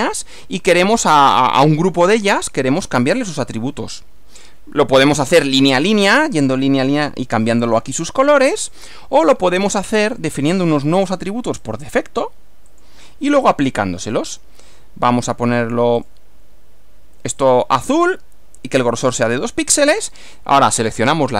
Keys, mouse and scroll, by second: 6.1 click, 8.3 click, 10.1 click, 11.7 click, 12.7 click, 14.8 click, 16.1 click, 17.5 click, 19.1 click, 19.7 click.